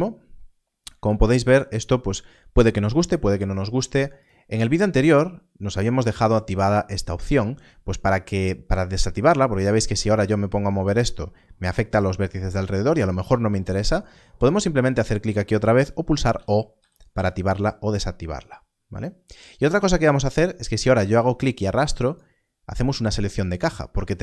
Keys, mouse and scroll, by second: 0.2-0.8 scroll up 1, 4.1 click, 9.0 click, 9.9 g, 14.3 g, 14.3 click, 16.2 0, 16.7 0, 17.0 0, 21.1 click.